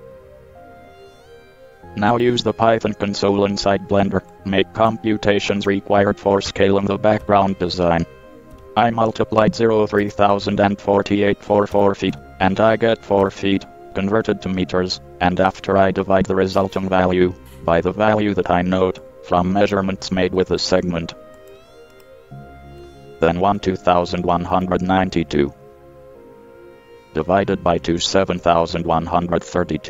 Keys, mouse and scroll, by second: 4.5-8.7 drag, 7.4 KP_Decimal, 8.7 KP_3, 10.2 KP_0, 10.5 KP_4, 10.7 KP_8, 11.9 KP_Multiply, 12.3 KP_4, 13.5 KP_Enter, 19.2-20.6 drag, 20.6 ctrl+c, 20.8 ctrl+c, 23.4 ctrl+v, 24.7 KP_Divide, 28.6 KP_2, 29.1 KP_Decimal.